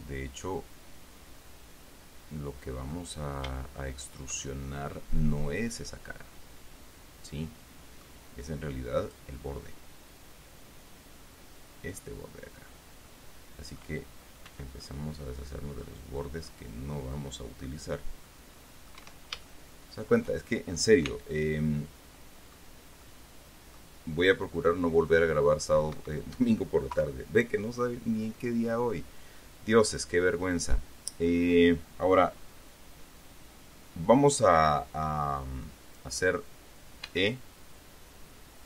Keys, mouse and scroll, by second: 3.5-3.9 scroll up 3, 3.9 shift+click, 5.1-8.6 drag, 9.4 click, 13.4 click, 14.8 c, 15.1-16.4 drag, 16.8 click, 18.6 click, 19.3 Escape, 19.7 shift+middle click, 21.4 c, 22.0-23.1 drag, 23.4 click, 24.8 click, 25.9 click, 26.3 Escape, 27.3 KP_3, 28.1-28.5 scroll down 1, 28.7 scroll down 1, 29.7 scroll up 1, 30.2-32.0 middle drag, 37.4 e.